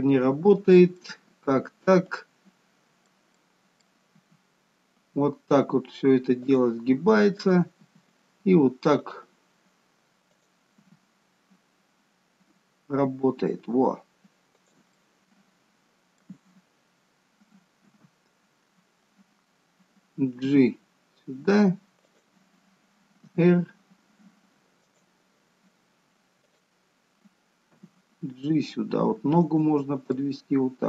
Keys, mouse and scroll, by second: 1.3 middle click, 3.7 middle click, 4.4 r, 7.5 click, 8.1 r, 10.6 click, 13.6 r, 15.2 middle click, 18.1 KP_1, 20.7 g, 23.5 r, 26.8 click, 28.1 g, 30.3 middle click.